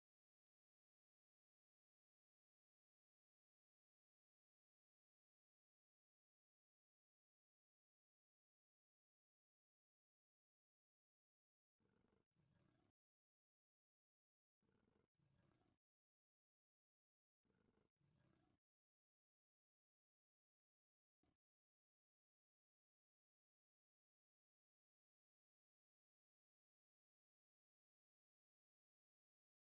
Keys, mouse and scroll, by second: 2.7 shift+middle click, 3.3 a, 3.5 c, 3.8 right click, 4.2-5.5 drag, 5.7 a, 5.8 c, 6.2 right click, 6.6-7.8 drag, 8.4 shift+middle click, 9.1 a, 9.2 c, 10.2 right click, 10.6 click, 12.0 a, 12.0 c, 12.5 right click, 13.2 a, 13.3 c, 13.7 right click, 14.1 click, 15.9 shift+middle click, 17.3 right click, 17.3 c, 17.4 a, 17.7 c, 18.7 right click, 19.3 shift+middle click, 19.7 c, 20.5 right click, 22.2-27.4 drag, 29.4 shift+middle click.